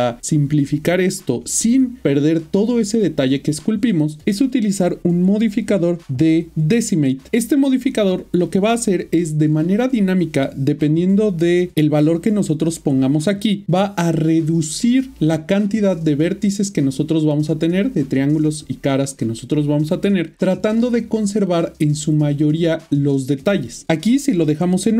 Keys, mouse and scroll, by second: 2.5 middle click, 5.2 click, 8.0 click.